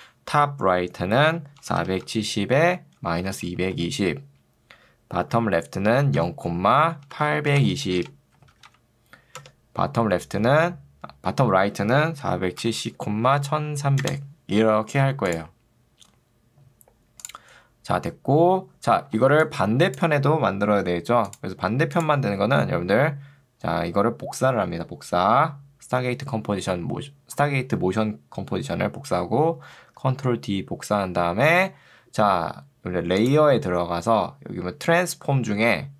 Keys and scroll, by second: 1.8 7, 2.2 0, 2.6 Tab, 3.6 0, 3.8 Tab, 6.2 0, 6.6 Tab, 7.0 7, 7.6 BackSpace, 8.4 8, 9.4 Tab, 10.4 4, 12.2-14.1 typing, 13.0 Tab, 19.2 ctrl+2, 20.4 Escape, 30.0 ctrl+d.